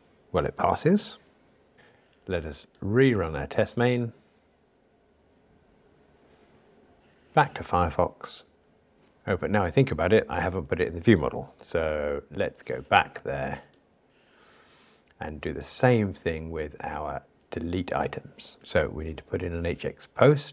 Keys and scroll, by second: 4.0 super+r.